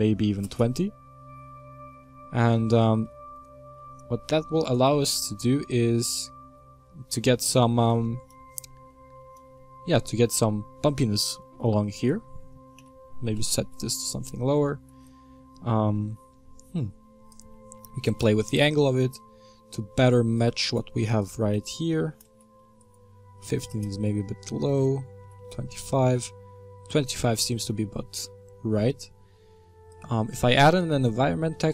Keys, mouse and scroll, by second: 1.4-1.9 scroll down 3, 1.9-4.7 middle drag, 4.7 ctrl+shift+click, 5.4-5.7 middle drag, 5.7 scroll up 2, 13.5-14.9 drag, 14.9-16.2 scroll down 2, 16.7-18.4 scroll down 1, 18.4-28.1 drag, 28.1-28.5 scroll down 2, 31.0-31.7 drag.